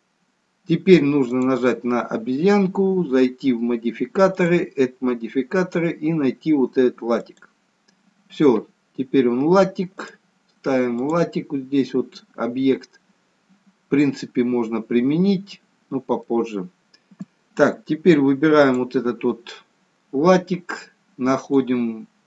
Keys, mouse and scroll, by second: 1.3 click, 5.6 click, 10.0 click, 16.2 middle click, 18.6 click, 21.3 click.